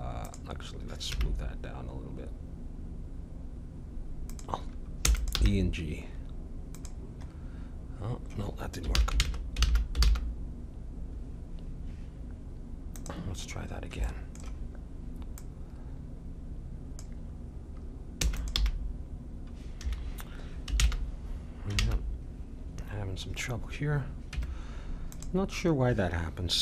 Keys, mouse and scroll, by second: 1.1 g, 5.0 e, 5.1-7.3 drag, 5.4 g, 7.3-10.0 middle drag, 8.9 ctrl+z, 9.2 ctrl+z, 9.6 ctrl+z, 10.0 ctrl+z, 12.9-15.3 drag, 14.0-17.0 middle drag, 15.4-18.2 drag, 18.2 e, 18.4-20.3 drag, 18.6 g, 20.7 ctrl+z, 21.9 ctrl+z, 24.3 Tab.